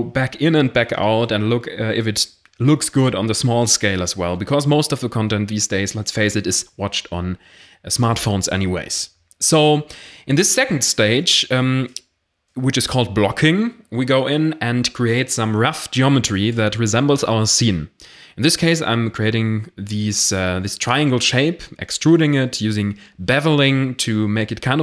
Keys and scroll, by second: 0.0-1.0 typing, 1.9 Tab, 2.4 alt+1, 3.3-5.5 typing, 7.0 x, 9.0 0, 10.0 ctrl+r, 11.1 ctrl+r, 12.1-13.3 typing, 14.7 ctrl+shift+b, 16.7 Tab, 17.2 a, 17.7 e, 17.9 y, 18.8 Tab, 19.1 0, 21.0 Tab, 21.8 shift+d, 22.9 p, 23.5 Tab, 24.4 s.